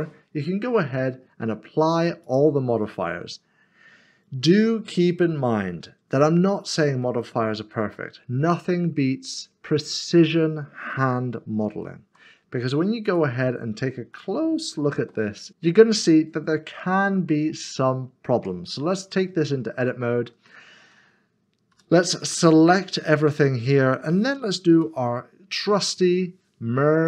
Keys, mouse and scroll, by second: 2.2 middle click, 2.7 click, 5.8 middle click, 7.0 shift+middle click, 8.2 scroll down 1, 10.0 scroll up 1, 11.7 d, 13.0 click, 13.6 middle click, 14.1 shift+middle click, 15.5 typing, 16.2 middle click, 17.0-17.7 shift+scroll up 1, 19.4 scroll up 1, 19.9 shift+middle click, 21.7 a, 22.3 middle click.